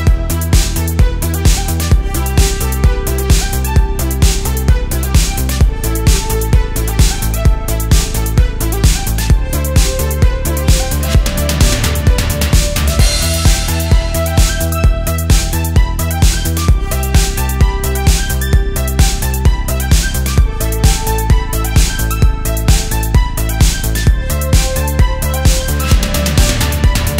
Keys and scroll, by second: 0.0 Escape, 0.3 super+space, 0.7 super+space, 1.1 super+space, 2.0-4.6 typing, 5.2 alt+super+space, 6.5 space, 7.2 super+space, 7.3 super+space, 8.3 super+z, 8.9 super+z, 9.5 super+z, 12.7 space, 12.8 space, 14.5 alt+super+space, 15.2 space, 15.8 space, 17.0 super+z, 17.4 super+z, 17.5 space, 21.9 space, 22.8 space, 23.4 space, 24.3 space, 24.8 super+space, 24.8 super+space, 26.5 space.